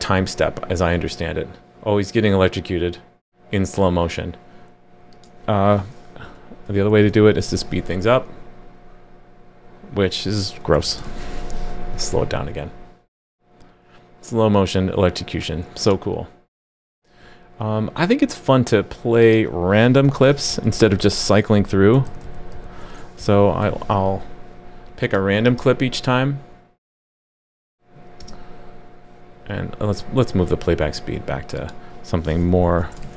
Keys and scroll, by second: 7.5 super+s, 11.0 super+s, 20.0 super+/, 23.2 super+/, 23.6 super+s, 33.0 super+s.